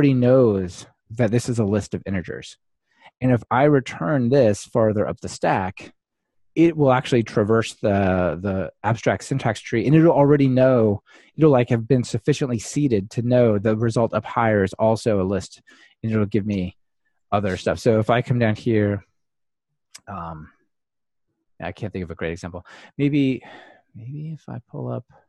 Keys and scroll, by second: 18.6 Delete.